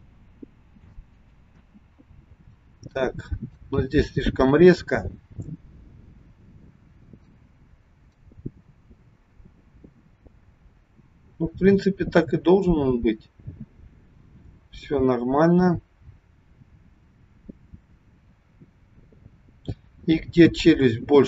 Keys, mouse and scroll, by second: 1.7 space, 3.7 click.